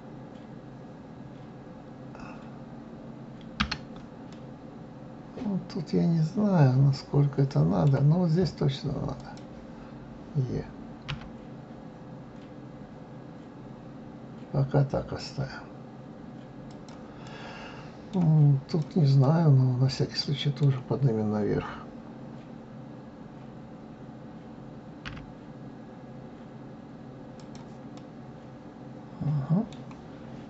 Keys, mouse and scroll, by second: 4.3-7.3 middle drag, 9.2 click, 11.1 e, 17.2-18.6 middle drag, 18.6 click, 19.2-22.2 middle drag, 25.1 e, 27.9-30.4 middle drag.